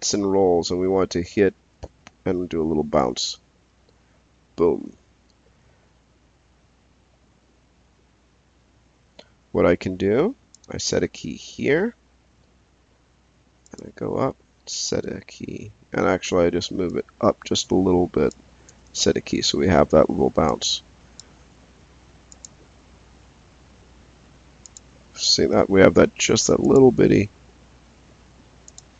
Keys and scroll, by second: 11.5 s, 14.9 s, 18.7 s.